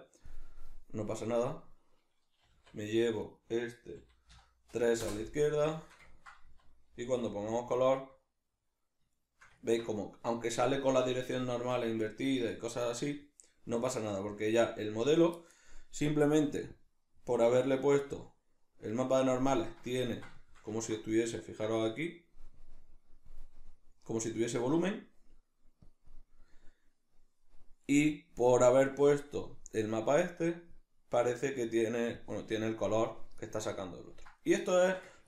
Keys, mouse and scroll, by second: 1.4 right click, 2.4 g, 3.4 right click, 3.9 g, 5.8-16.8 shift+middle drag, 6.4 z, 16.8 click, 18.2 click, 20.0-22.6 ctrl+middle drag, 22.6 drag, 25.8 click, 26.0-28.1 middle drag, 28.1 click, 29.0-30.4 middle drag, 30.4 click, 32.2 click, 33.6-35.2 ctrl+middle drag.